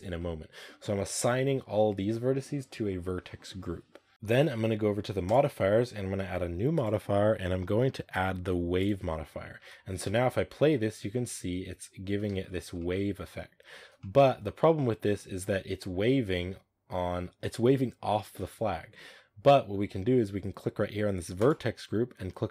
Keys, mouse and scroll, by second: 9.4 Tab, 9.9 space, 11.0-11.8 middle drag, 11.8 scroll up 1, 12.2 shift+middle drag, 12.3 scroll up 4, 12.7-15.3 middle drag, 15.3 space, 15.4-15.9 scroll up 3, 15.9 space, 21.2 space.